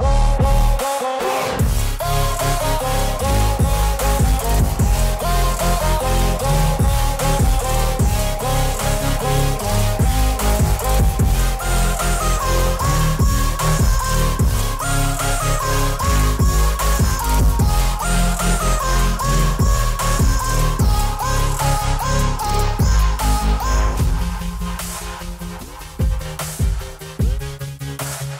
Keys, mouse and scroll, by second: 0.4 click, 3.1 click, 3.9 [, 4.0 [, 5.1 alt+click, 6.2 space, 6.4 click, 6.9 alt+click, 8.7 space, 8.9 click, 9.0 space, 9.3 alt+click, 11.3 space, 11.4 click, 11.4 space, 11.9 alt+click, 12.6 space, 12.7 click, 12.8 space, 13.2 alt+click, 14.2 alt+click, 14.3 ctrl+z, 15.4-16.2 typing, 16.9 alt+click, 18.1 alt+click, 19.9 alt+click, 23.0 click, 25.8 click.